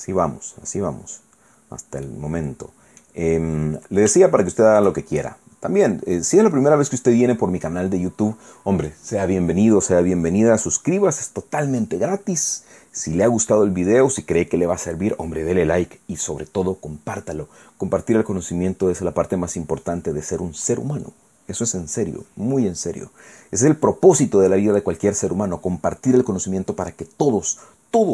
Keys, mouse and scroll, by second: 2.1-3.2 drag, 3.3-3.7 scroll up 1, 4.1 shift+scroll up 1, 4.2 shift+click, 5.5-5.9 scroll up 2, 6.5-6.9 scroll down 2.